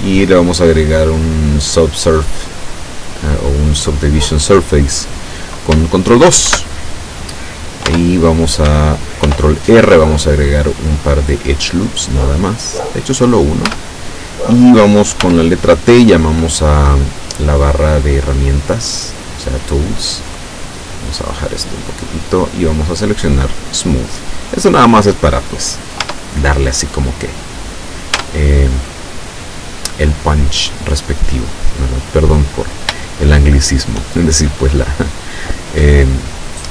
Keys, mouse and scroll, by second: 6.5 ctrl+2, 7.9 Tab, 9.3 ctrl+r, 9.8 ctrl+click, 12.9 click, 13.7 Tab, 15.2 t, 18.2-19.0 scroll up 2, 21.2-22.7 drag, 23.5 click, 26.1 Tab, 28.2 Tab, 29.2 scroll down 2, 29.9-30.2 scroll down 2, 31.8 scroll up 2, 32.3 scroll down 2, 33.1-34.6 shift+middle drag.